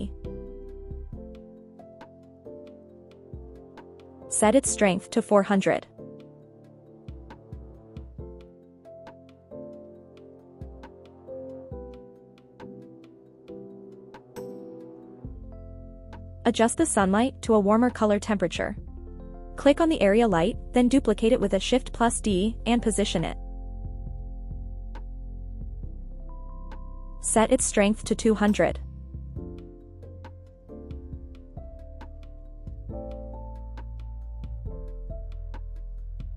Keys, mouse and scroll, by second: 3.2 click, 5.1 click, 6.0 click, 7.7 KP_0, 12.6 g, 12.9 z, 13.9 click, 15.7 click, 17.2 click, 20.9 click, 23.0 KP_7, 25.3 shift+d, 26.5 middle click, 28.1 click, 29.8 click, 31.1 KP_0.